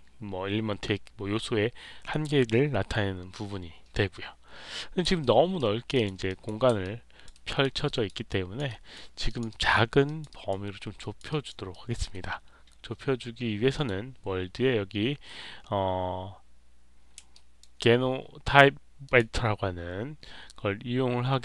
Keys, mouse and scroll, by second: 5.1 alt+right click, 5.8 alt+click, 6.2 click, 6.7 alt+click, 7.2 alt+right click, 7.8 alt+right click, 8.2 alt+click, 8.6 alt+right click, 9.2 alt+click, 9.4 alt+right click, 10.0 alt+click, 10.2 alt+right click, 10.9 alt+click, 11.2 alt+right click, 11.6 alt+click, 13.7 click, 17.2 alt+right click, 19.0 click.